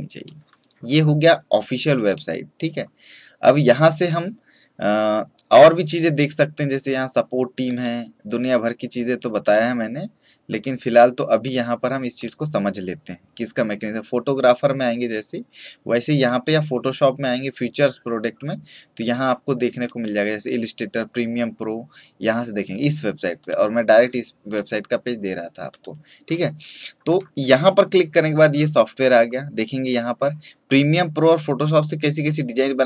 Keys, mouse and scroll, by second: 7.6 click, 19.8 click, 28.4 scroll down 1, 29.0 scroll up 1, 31.8-32.8 drag.